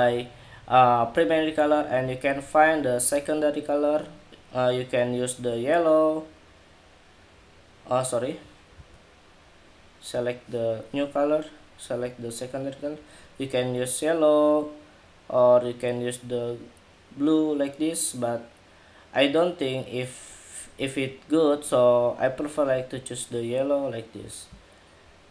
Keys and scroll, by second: 8.4 super+z.